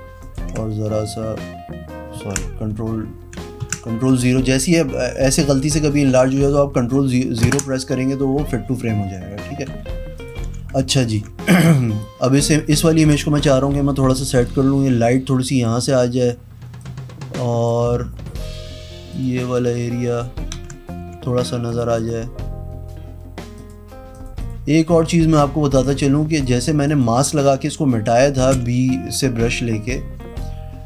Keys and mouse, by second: 0.2 ctrl+alt+right click, 2.1 ctrl+KP_0, 2.9 z, 3.6 ctrl+KP_Subtract, 5.9 ctrl+KP_Subtract, 7.4 ctrl+KP_0, 8.6 ctrl+KP_Subtract, 9.7 z, 10.1 click, 10.4 v, 10.9 ctrl+alt+right click, 11.8 v, 12.2 click, 12.8 ctrl+z, 13.3 click, 16.8 click, 18.4 click, 18.6 e, 19.1 click, 19.5 click, 20.5 ctrl+z, 20.7 click, 20.9 v, 21.6 click, 21.9 click, 23.5 click, 24.1 click, 24.4 click, 25.7 click, 26.8 click, 28.5 b.